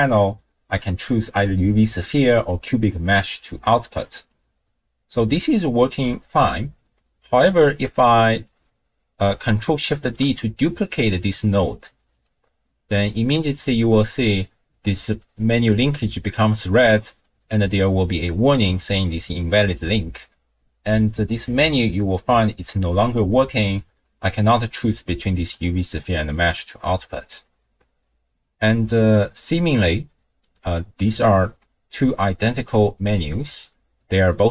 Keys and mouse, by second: 3.6-4.5 drag, 7.5 click, 9.9 ctrl+shift+d, 21.4-27.5 drag.